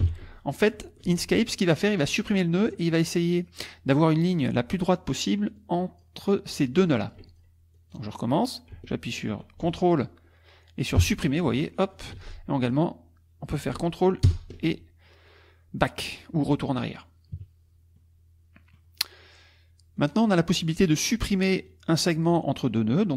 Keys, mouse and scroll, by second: 0.0 ctrl+Delete, 1.1 ctrl+z, 1.9 click, 5.6 click, 6.6 shift+click, 7.8 shift+click, 11.0 ctrl+Delete, 12.2 ctrl+z, 12.6 ctrl+click, 14.3 ctrl+BackSpace, 17.3 KP_Subtract, 18.0 middle click, 20.0 click, 20.5 middle click, 21.7 click.